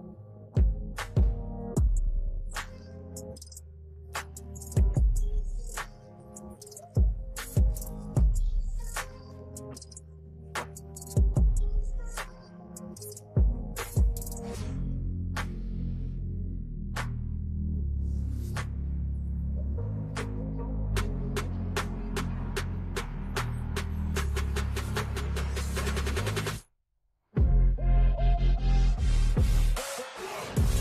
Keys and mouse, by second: 0.6 click, 5.1 click, 6.9 click, 9.3 click, 11.3 click, 13.5 click, 14.6 click, 17.5 click, 19.3 click, 22.2 click, 25.4 click, 26.5 v, 27.2 click, 28.7 Left, 28.8 Left, 29.0 Left, 29.3 Left, 29.8 Left, 30.0 Left, 30.6 Left.